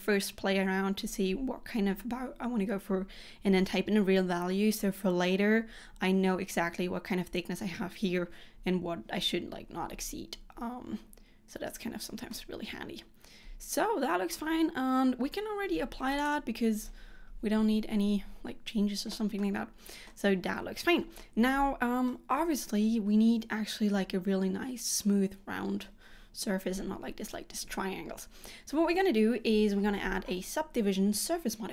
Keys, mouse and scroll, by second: 10.6-12.4 scroll down 1, 12.4 middle click, 16.3 click, 19.6 middle click, 21.3 middle click.